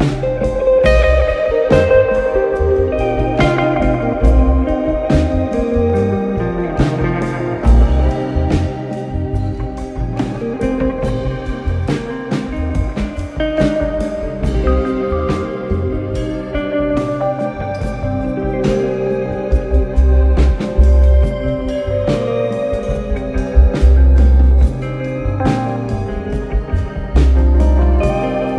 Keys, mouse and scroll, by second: 8.5-8.8 scroll, 8.8-9.6 scroll down 1, 9.6 click, 11.8-12.9 drag, 12.9-13.5 scroll down 1, 13.5-14.8 scroll up 1, 14.8-17.4 drag, 18.2 alt+click, 21.2-22.6 drag, 23.4 click, 23.9 click, 24.8 click, 25.9 click, 27.2 click.